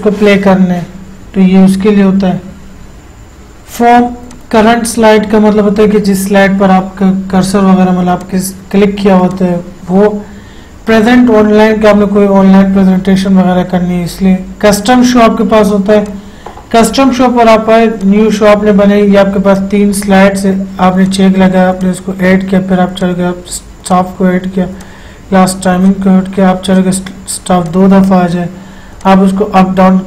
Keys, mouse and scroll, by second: 3.3 F8, 4.7 click, 8.5 click, 8.6 click, 15.0 click.